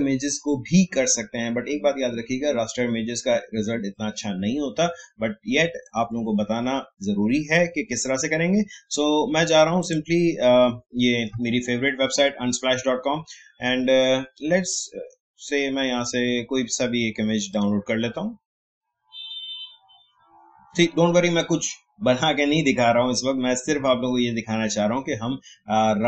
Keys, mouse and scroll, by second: 9.8 click, 12.4 scroll down 1, 14.3 scroll up 1, 17.5 click.